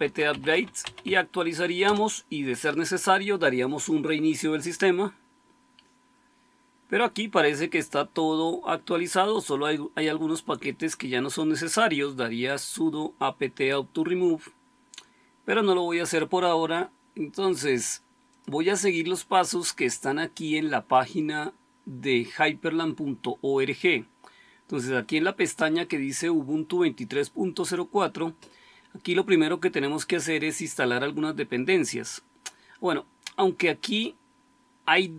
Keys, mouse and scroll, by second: 0.0-1.5 typing, 1.8 Return.